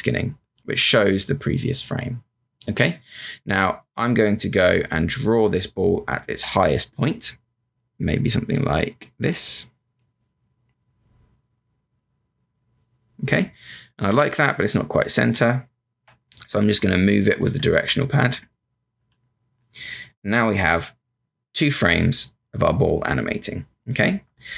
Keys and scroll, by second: 4.9 space, 5.7 space, 6.0 space, 10.0 z, 14.0 v, 15.3 Left, 16.2 Right, 16.5 Up, 17.1 Left, 18.9 Left.